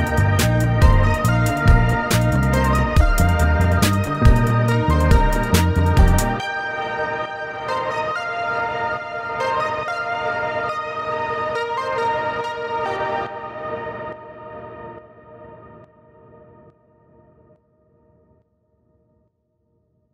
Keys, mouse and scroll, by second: 3.8-5.2 right drag, 5.4 right click, 5.9 right click, 6.3 right click, 6.6 right click, 7.3 right click.